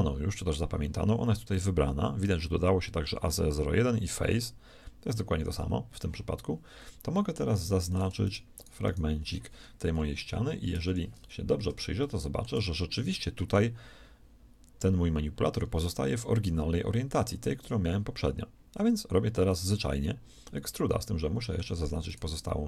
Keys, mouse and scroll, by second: 3.6-5.2 scroll down 2, 5.2-5.6 scroll up 2, 5.6 scroll down 2, 10.2 KP_1, 10.8 ctrl+KP_3, 20.5-22.6 middle drag.